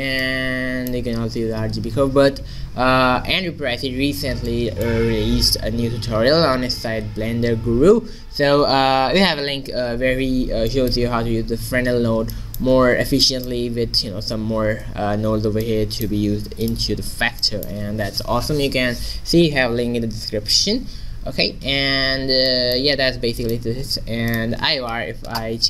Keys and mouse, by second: 0.9-2.9 middle drag, 4.6-8.2 middle drag, 10.8 middle click, 16.7-18.9 middle drag, 22.4 middle click, 23.0-24.3 middle drag, 24.3-25.6 drag.